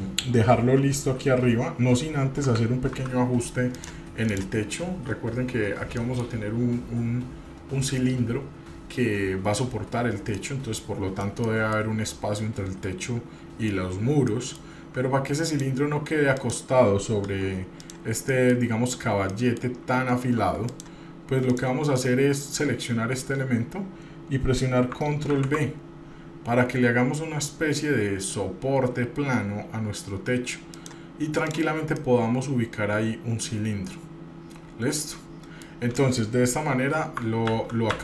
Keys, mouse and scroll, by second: 2.6 g, 4.5 click, 5.8-6.2 scroll up 1, 6.2 middle click, 6.5 scroll up 1, 10.6-11.4 middle drag, 11.6-12.0 middle drag, 14.5 middle drag, 15.6 click, 17.4 Tab, 18.0 click, 18.5 middle click, 19.2 scroll up 1, 19.5 middle click, 20.9 shift+click, 21.7 shift+click, 22.1-23.4 middle drag, 25.5 ctrl+b, 31.7 click, 32.1-36.0 middle drag, 36.1 middle click, 37.7 ctrl+z.